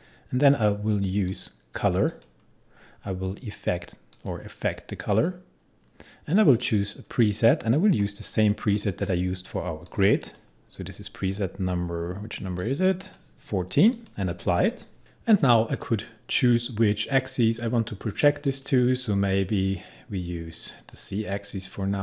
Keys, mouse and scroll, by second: 1.3 click, 3.0-3.4 scroll down 1, 4.2 click, 10.7-12.6 scroll down 1, 12.6-13.9 drag, 18.5 click.